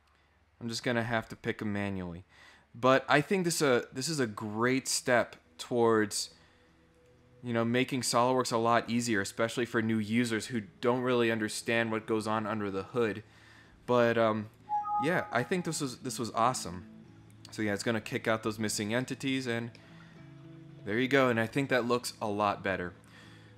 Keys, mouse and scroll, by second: 3.3-4.0 scroll up 4, 4.5 scroll down 1, 5.6 scroll up 2, 5.7 middle click, 6.9 click, 14.4 click, 16.6 click, 18.9 scroll up 1, 19.0 middle click, 19.4 scroll up 1, 19.7-20.8 middle drag.